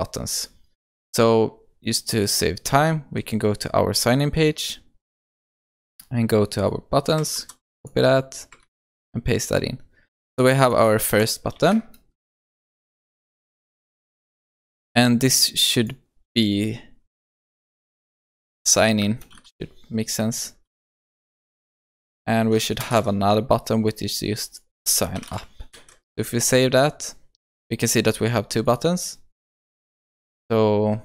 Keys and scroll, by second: 7.4 ctrl+c, 12.6 ctrl+v, 21.9 ctrl+c, 22.9 ctrl+v, 25.7 ctrl+v, 25.8 ctrl+s.